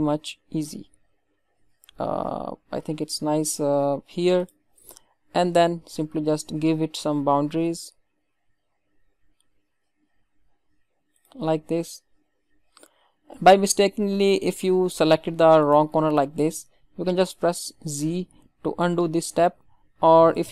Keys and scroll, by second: 17.7 ctrl+z.